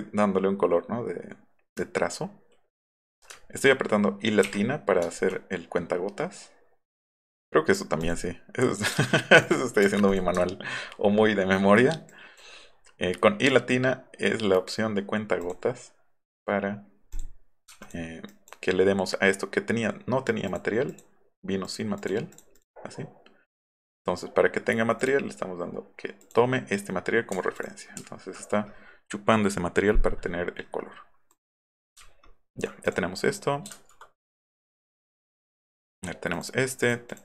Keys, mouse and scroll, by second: 3.5 alt+middle click, 3.5 alt+scroll up 2, 4.4 i, 5.1 alt+right click, 8.0 click, 9.4 click, 9.8 v, 10.1 click, 10.7 alt+scroll up 2, 12.1 drag, 15.4 click, 17.1 click, 17.8 drag, 18.2 drag, 20.4 click, 20.9 click, 21.6 click, 21.9 click, 22.3 click, 23.5 drag, 25.0 click, 26.2 click, 27.6 click, 28.0 alt+middle click, 31.3 click, 32.0-32.6 alt+scroll down 6, 32.8 click, 34.5 click, 35.7 click, 36.3 click, 36.8 click, 37.1 click.